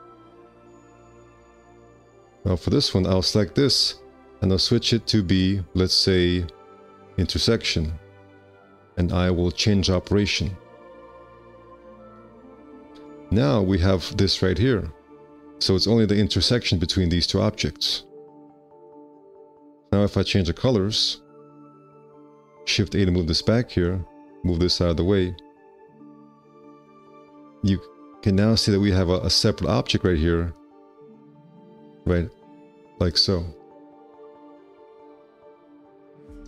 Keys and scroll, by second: 13.2 x, 23.6 shift+a, 27.6 F4, 34.0 q, 36.1 `.